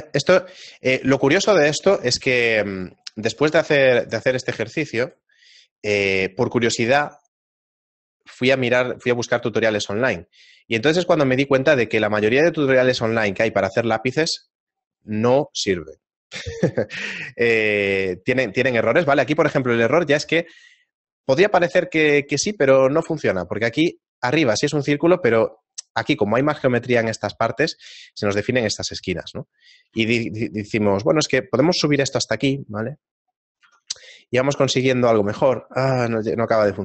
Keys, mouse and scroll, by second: 0.1 ctrl+r, 1.4 a, 2.4 ctrl+Tab, 4.1 right click, 4.8 shift+right click, 5.1 right click, 5.5 shift+middle click, 6.5 shift+right click, 7.3 shift+middle click, 8.2 shift+right click, 9.0 shift+right click, 9.7 shift+middle click, 10.6 shift+right click, 10.8 shift+right click, 12.5 shift+middle click, 13.3 shift+right click, 13.7 shift+right click, 14.4 shift+middle click, 19.1 Tab, 19.3 shift+middle click, 20.8 scroll up 1, 21.3 scroll up 6, 21.7 scroll down 1, 21.8-22.4 scroll down 6, 22.7 scroll up 1, 26.1-27.7 scroll down 2, 27.7 middle click, 27.7-28.7 scroll down 2, 28.7 Tab, 29.9 g, 33.7 Tab, 34.1 shift+middle click, 36.0 Tab, 36.0-36.7 scroll up 1, 36.7 right click, 36.7-36.8 scroll up 2.